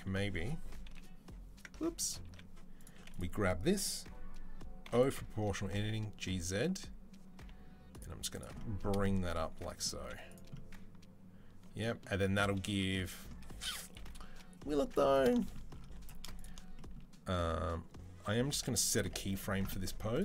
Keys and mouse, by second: 0.7 i, 2.1 ctrl+z, 4.7 o, 5.4 g, 7.9 z, 9.8 z, 13.8 KP_3, 14.6 Tab, 15.1 shift+drag, 15.3-15.9 middle drag, 15.9 shift+click, 16.0 middle click, 16.4-16.8 shift+drag, 16.8-20.1 middle drag, 20.1-20.2 drag.